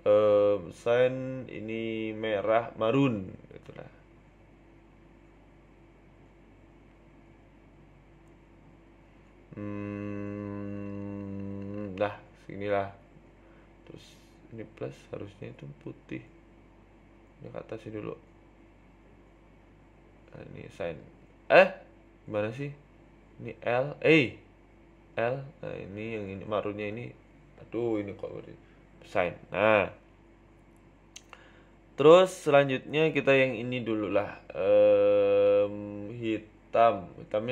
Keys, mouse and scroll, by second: 0.7 o, 1.9 click, 12.7 click, 13.3 click, 15.5 click, 17.1 Tab, 17.9 Tab, 17.9 a, 19.0 click, 19.4 Tab, 19.5 Tab, 20.1 a, 20.6 l, 21.0 right click, 21.2 a, 21.8 a, 23.0 a, 23.4 l, 24.2 click, 24.9 click, 25.1 click, 26.9 click, 27.3-27.8 scroll up 2, 27.8 shift+middle click, 28.0-28.5 scroll down 4, 28.5 shift+middle click, 28.8 middle click, 29.1-29.8 scroll up 6, 29.4 shift+middle click, 29.8 middle click, 30.2 shift+middle click, 30.4 middle click, 30.8 shift+middle click, 31.1 Tab, 31.3 right click, 32.0 click, 33.1 click, 33.2 click, 34.5 BackSpace, 36.2 click.